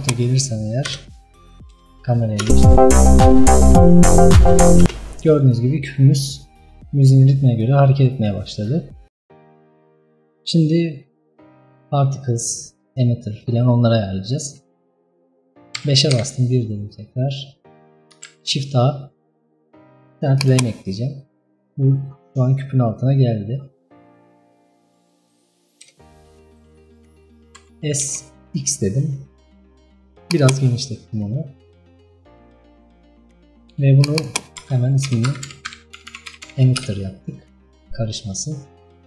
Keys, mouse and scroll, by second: 0.0 click, 0.6 KP_0, 1.5 KP_0, 2.4 space, 4.9 space, 11.6 scroll down 2, 12.0 scroll up 2, 15.2 KP_5, 16.0 KP_1, 17.6-20.5 middle drag, 20.5 shift+a, 21.4-21.9 middle drag, 21.9-22.9 scroll up 9, 22.9-23.8 middle drag, 23.8-24.5 scroll down 10, 24.5-25.4 middle drag, 25.4 scroll up 1, 25.6 KP_0, 26.6-27.7 middle drag, 27.7 s, 30.8-32.9 scroll up 5, 34.3-36.8 drag, 36.8 t, 37.8-39.0 scroll down 3.